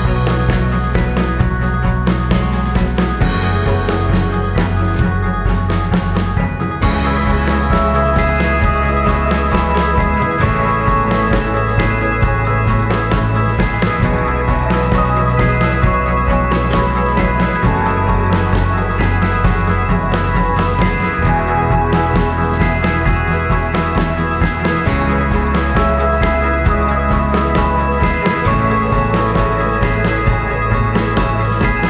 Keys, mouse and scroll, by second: 0.2-1.9 drag, 2.4-6.1 drag, 6.5-8.1 drag, 8.4 alt+click, 9.9 alt+click, 10.5 alt+click, 11.3 scroll up 2, 12.0 scroll down 2, 29.8 click.